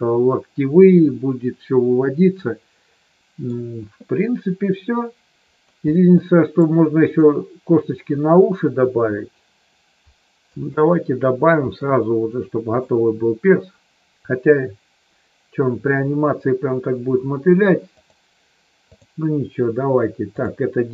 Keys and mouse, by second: 2.5-3.5 middle drag, 6.0 middle click, 10.5 KP_3, 11.7-12.9 shift+middle drag, 17.9-19.0 drag, 20.2 click.